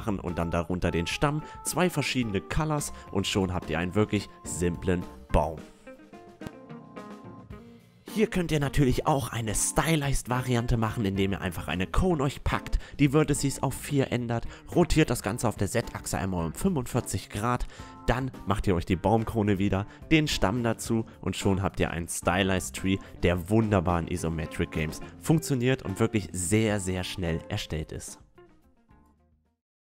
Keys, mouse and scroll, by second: 0.1-2.8 typing, 1.9 Tab, 2.1 click, 2.5 click, 2.6 right click, 4.4 Tab, 4.5 a, 4.7 Tab, 4.7 click, 4.8 a, 5.4 click, 5.8 a, 8.3-10.2 drag, 11.0 r, 15.2 KP_1, 17.5 s, 19.2 click, 19.9-21.4 typing, 20.0 right click, 20.3 Tab, 20.8 click, 21.7 Tab, 22.5 Tab, 22.8 Tab, 23.0 a, 23.1 Tab, 23.3 s, 23.5 s, 24.1 a, 24.1 Tab.